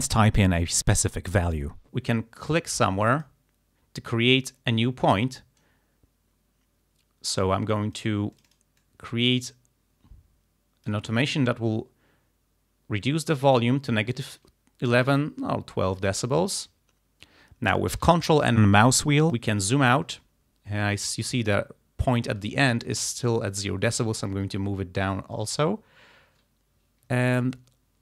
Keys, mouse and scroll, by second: 3.1 click, 4.4-8.2 drag, 8.4 click, 8.8-11.2 drag, 15.2-16.4 drag, 18.6-19.1 ctrl+scroll down 2, 22.7-25.9 drag, 27.5-28.0 ctrl+scroll up 2.